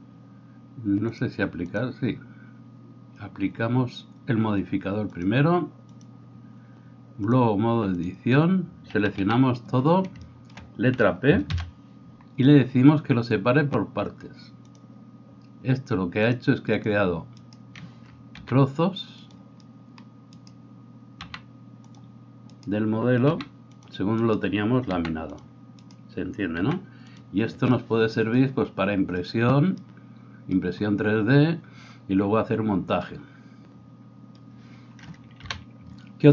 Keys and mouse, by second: 9.0 a, 9.2 a, 11.5 p, 17.4-18.4 middle drag, 17.4-18.4 right drag, 18.4 g, 19.3-24.2 middle drag, 21.2 g, 23.2 g, 24.2 right click, 24.4-25.9 middle drag, 25.0 g, 25.9 right click, 26.6-36.3 middle drag, 26.6 g, 35.4 KP_1.